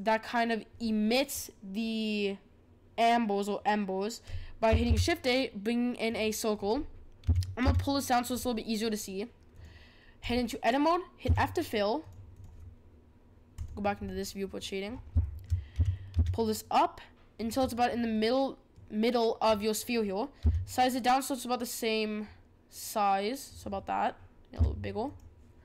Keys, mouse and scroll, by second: 4.8 shift+a, 7.2 g, 9.5-11.2 drag, 11.2 f, 12.0-13.6 drag, 14.0-14.9 middle drag, 14.9-15.2 scroll up 4, 15.2-15.7 shift+middle drag, 15.7 g, 18.1-20.4 middle drag, 20.4 s, 24.5 s.